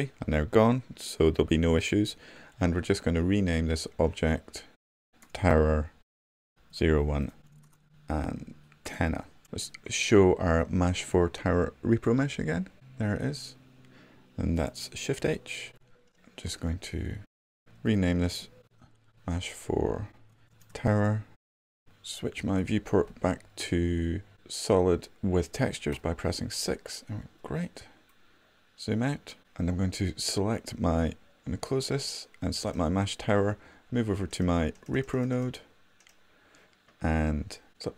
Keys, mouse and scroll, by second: 15.6 shift+h, 26.5 6.